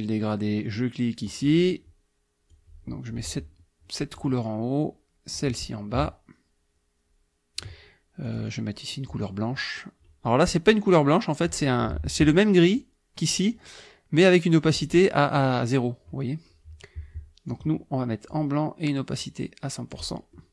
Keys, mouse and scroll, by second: 1.3 click, 2.5-4.4 drag, 5.4-7.8 drag, 8.3 click, 12.7 click, 14.7 click, 17.5 click, 19.2 click, 20.4 middle click.